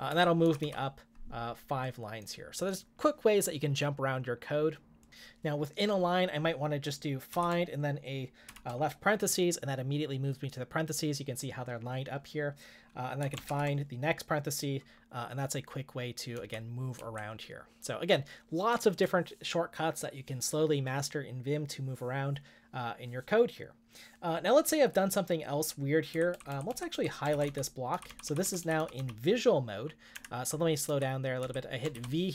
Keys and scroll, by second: 0.0-1.1 typing, 8.2-8.9 typing, 13.2-13.9 typing, 16.7-17.5 typing, 26.2-28.8 typing, 30.1 Escape, 30.8 j, 31.4 k, 31.9 shift+v.